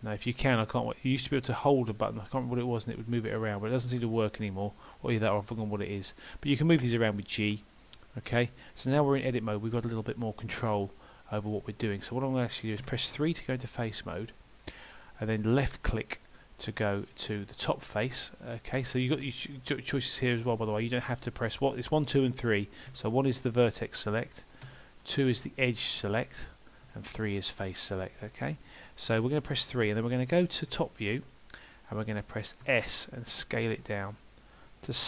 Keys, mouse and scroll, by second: 2.5 click, 4.4 right click, 5.6 click, 6.7 g, 8.1 middle click, 11.3-12.8 scroll up 1, 12.8 3, 15.6 click, 23.6 click, 24.7 2, 25.5 click, 26.9 3, 27.5 click, 30.7 KP_7, 32.7 s.